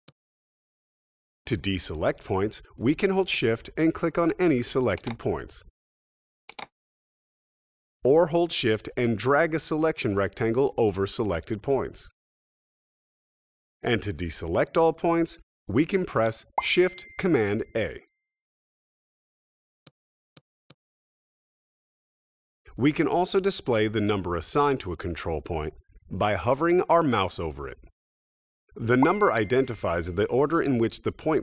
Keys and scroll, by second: 16.4 shift+super+a, 20.6 super+a.